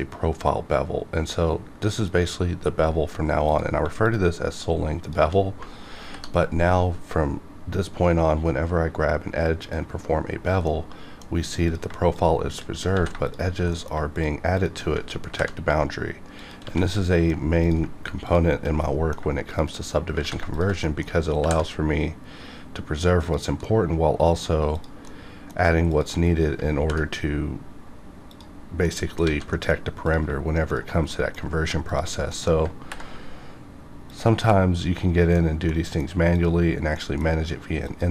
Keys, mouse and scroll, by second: 3.6 click, 6.0 ctrl+b, 9.6 click, 10.6 middle click, 11.7 click, 12.1 shift+click, 12.9 ctrl+z, 13.2 shift+click, 13.7 shift+middle click, 14.1 shift+click, 15.3 ctrl+b, 16.4 click, 16.6 alt+a, 16.9 middle click, 17.6 click, 18.2 shift+click, 18.8 middle click, 19.5 shift+click, 20.2 ctrl+z, 20.5 shift+click, 20.8 shift+middle click, 21.4 ctrl+b, 23.3 click, 23.6 middle click, 23.8 middle click, 24.7 click, 25.0 middle click, 25.9 shift+click, 26.8 ctrl+b, 28.3 click, 28.6 scroll down 1, 28.8 middle click, 29.3 alt+a, 29.5 middle click, 30.0 click, 30.7 shift+click, 31.1 middle click, 31.4 scroll up 1, 31.9 shift+click, 32.3 scroll up 1, 32.4 middle click, 32.8 ctrl+b, 34.1 click, 34.4 middle click, 35.4 scroll down 1, 35.7 middle click, 36.3 click, 36.9 middle click, 37.8 shift+click.